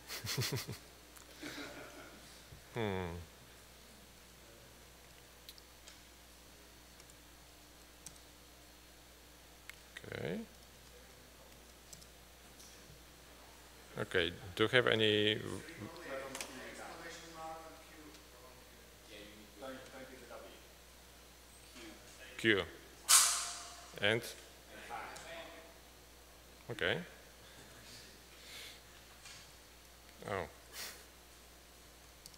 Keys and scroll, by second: 5.3 Down, 7.0 Escape, 7.5-7.9 typing, 8.1 Return, 10.1 Escape, 10.7-11.6 typing, 12.0 Return, 20.0 Escape, 21.6 typing, 22.7 typing.